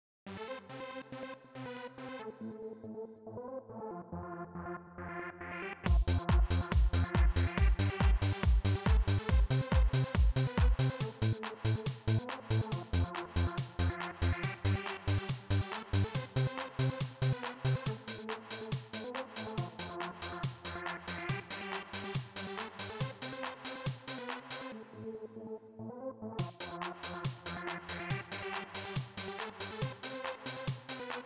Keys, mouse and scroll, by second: 1.6 click, 3.3-4.9 drag, 5.6 click, 7.1 click, 8.5 click, 10.6 click, 12.9-13.9 drag, 14.1 click, 14.6 right click, 18.6-21.1 drag, 27.9 click, 29.0 click, 30.0 click, 30.6 click.